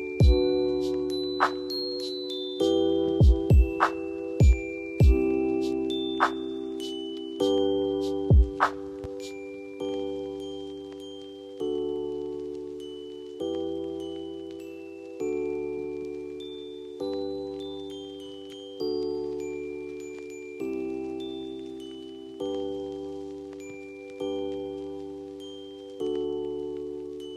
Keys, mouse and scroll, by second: 5.9-9.3 drag, 10.4 click, 16.3 click, 25.3 ctrl+click, 26.8 ctrl+click.